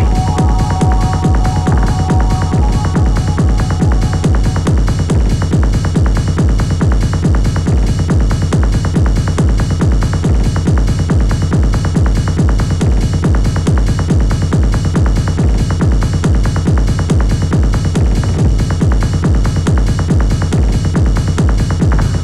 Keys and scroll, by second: 5.5 3, 9.0 4, 16.3 0, 16.5 Return.